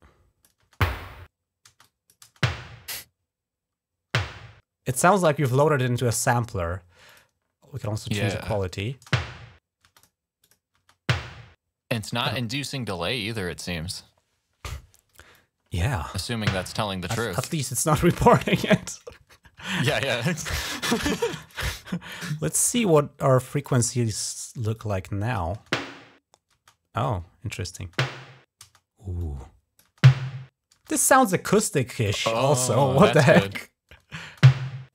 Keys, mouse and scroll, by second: 0.4 space, 1.5 space, 1.6 click, 2.1 space, 4.8 space, 6.9 click, 7.6 click, 8.2 click, 8.8-10.6 typing, 9.8 click, 10.2 click, 11.8 typing, 15.1 click, 16.1 space, 16.9 space, 19.9 click, 21.2 click, 21.9 click, 23.3 click, 23.4 click, 24.6 click, 25.4 space, 26.4 space, 26.8 click, 27.6-28.5 typing, 29.0 click, 29.7 space, 34.1 space.